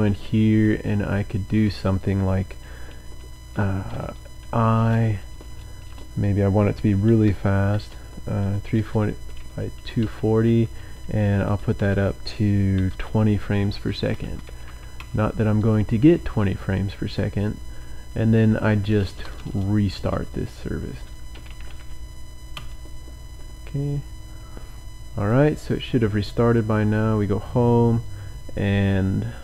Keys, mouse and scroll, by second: 0.2 Down, 0.6 Down, 0.9 Down, 3.0 End, 4.4 i, 4.8 BackSpace, 6.8-8.8 typing, 10.0 Down, 10.5 Left, 11.1 Left, 11.4 Right, 11.7-12.9 typing, 13.5 Escape, 13.9-15.2 typing, 16.5-22.5 typing, 18.1 Up, 24.1-24.8 typing, 25.2 click, 26.4 click, 27.7 scroll down 2.